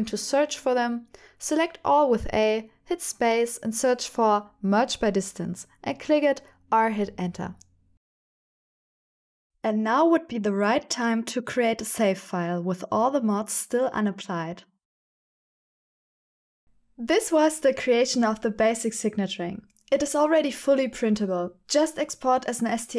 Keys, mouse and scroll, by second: 0.7 click, 0.9 middle click, 1.4 a, 1.9 shift+click, 4.7 space, 8.5 click, 9.4 Tab, 9.4 g, 9.4 y, 10.2-18.5 middle drag, 19.7-22.9 drag.